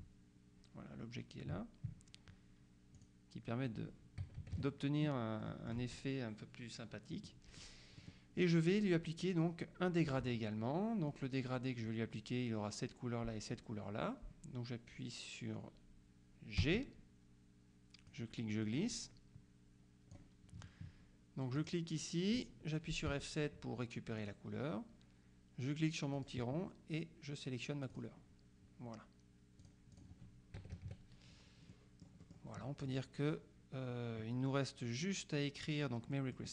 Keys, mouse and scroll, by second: 3.0 click, 4.3 KP_Subtract, 5.5 click, 7.2 click, 16.7 g, 18.2-20.7 drag, 21.6 click, 23.2 F7, 24.2 click, 26.2 click, 28.0 click, 29.7 click, 30.7 KP_Subtract, 31.7 scroll down 2, 31.8-32.9 middle drag, 36.2 middle click.